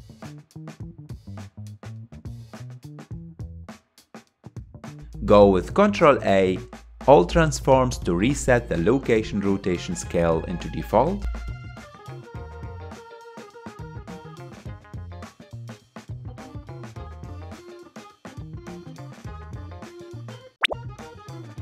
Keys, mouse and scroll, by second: 4.4 ctrl+a, 11.5 click, 13.3 shift+click, 16.3 ctrl+j, 17.9 click, 19.1 s.